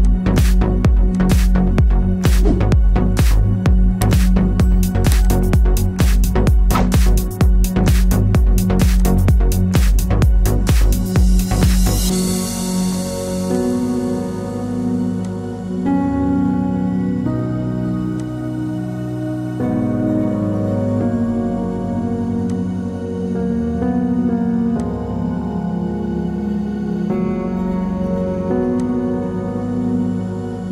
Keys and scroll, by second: 7.7 ctrl+t.